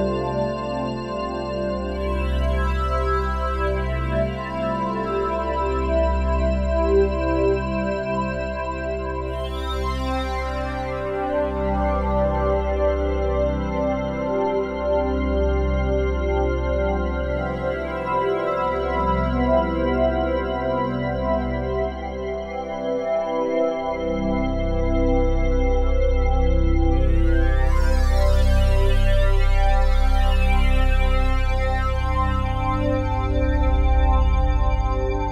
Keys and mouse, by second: 0.0-0.5 typing, 2.0 Escape, 2.5 alt+click, 3.3-4.6 typing, 4.9-6.7 ctrl+alt+drag, 6.7 -, 8.6-10.1 ctrl+alt+drag, 10.1 Delete, 10.6 click, 11.3 Delete, 11.6 click, 12.0 Delete, 13.2 ctrl+z, 13.8 ctrl+click, 13.8 typing, 14.8 Delete, 15.6 click, 16.3 Delete, 16.8 click, 17.5 Delete, 18.2 click, 19.0 Delete, 20.2-21.5 drag, 21.5 Delete, 22.1 click, 22.8 Delete, 24.1-25.8 alt+drag, 25.7 ctrl+s, 26.1-29.7 alt+drag, 29.7 typing, 32.8-34.9 drag, 35.0 click.